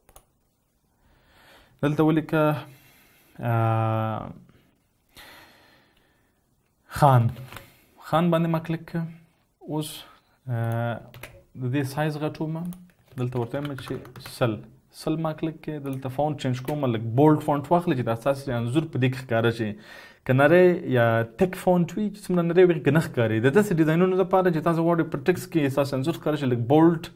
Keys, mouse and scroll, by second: 7.7-8.2 typing, 11.5-12.2 typing, 14.2-14.6 typing, 14.8 Return, 17.2 ctrl+a.